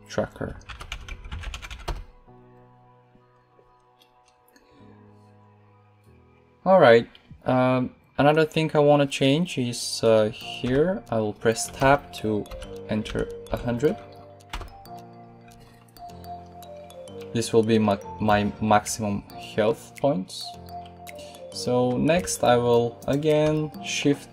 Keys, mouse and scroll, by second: 10.5 Tab, 11.7 BackSpace, 12.4 1, 12.9 0, 13.3 0, 14.4 Tab.